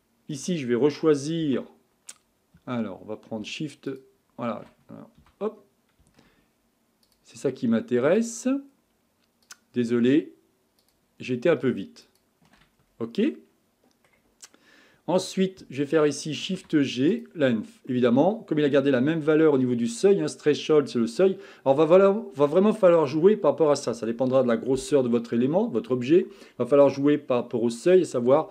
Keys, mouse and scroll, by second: 1.4 2, 3.9 alt+shift+click, 5.2 a, 7.1 alt+shift+click, 8.2 alt+shift+click, 9.4 alt+shift+click, 10.8 alt+shift+click, 12.0 alt+shift+click, 12.7-13.2 scroll down 3, 13.2-16.3 middle drag, 16.5 shift+g, 17.9-21.0 middle drag.